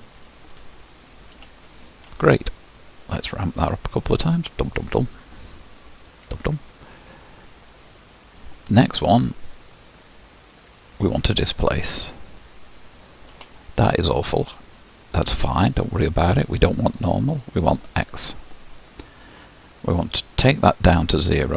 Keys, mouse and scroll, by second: 1.6-4.7 shift+middle drag, 4.7-9.1 drag, 9.1-10.8 scroll down 1, 12.2-13.5 drag, 13.5 shift+middle click, 14.4-16.5 scroll down 1, 16.5-17.7 scroll down 1, 17.7-21.5 drag.